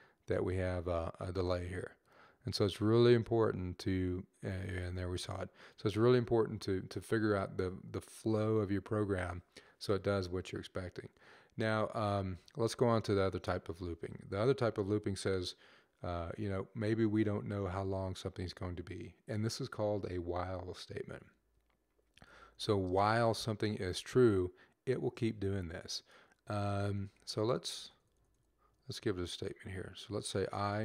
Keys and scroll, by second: 21.1-22.8 typing, 25.5 Right, 25.6 Right, 26.6 Up, 26.9 Left, 27.1 Left, 27.3 Left, 27.6 Left, 27.8 Left, 28.0 Left, 28.2 Left, 30.3 typing.